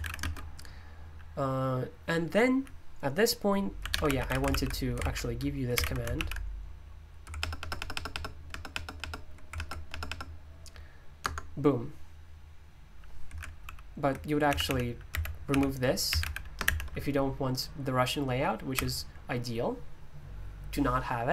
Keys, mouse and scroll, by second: 0.0-0.7 typing, 3.5-6.1 typing, 4.9 super+l, 6.1 ctrl+v, 7.1-7.9 typing, 7.9 ctrl+BackSpace, 8.1 ctrl+BackSpace, 8.4 ctrl+BackSpace, 9.2 ctrl+BackSpace, 9.5 ctrl+BackSpace, 10.0-17.1 typing, 11.2 Return, 13.6 super+l, 18.7 typing.